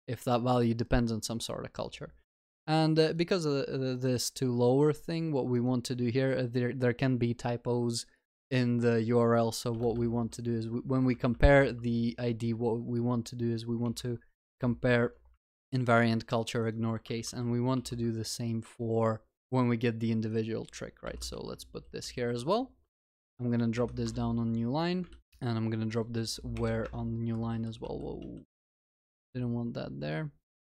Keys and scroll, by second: 14.6 Return, 15.3 Return, 17.1 ctrl+w, 18.3 ctrl+c, 21.4 ctrl+v, 22.1 ctrl+s, 25.1 ctrl+alt+shift+l, 27.5 ctrl+z.